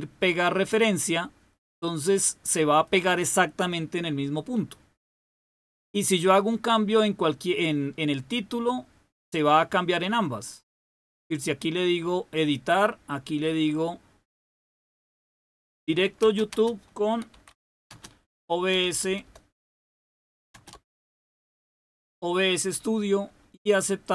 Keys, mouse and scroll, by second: 1.9 click, 5.4 click, 9.1 click, 11.7 click, 13.4-14.4 drag, 15.3 Right, 16.1-22.2 typing, 23.9 click.